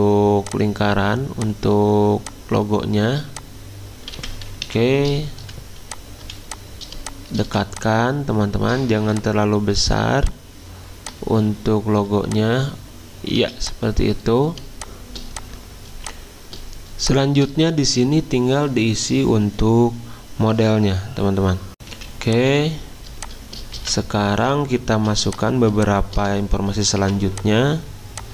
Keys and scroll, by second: 4.6 Escape, 5.4 v, 6.2 z, 7.4 v, 13.4 z, 21.7 z, 21.9 z, 23.7 v, 24.9 z, 27.0 v.